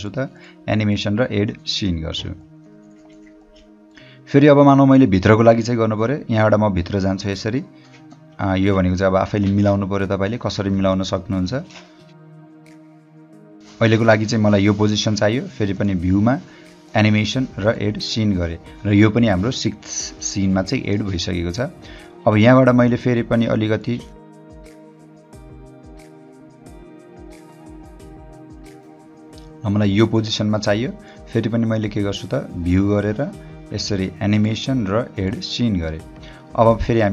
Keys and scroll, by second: 9.5 h, 12.8 o, 13.3 h, 22.5 o, 23.9 h, 25.6-26.8 typing, 31.0 space, 36.5 o.